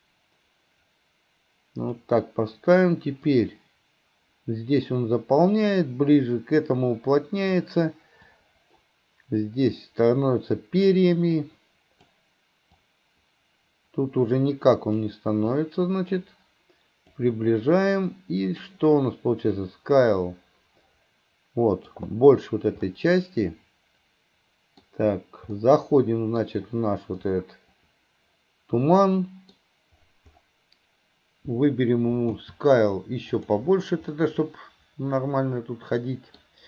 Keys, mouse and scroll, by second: 3.3 click.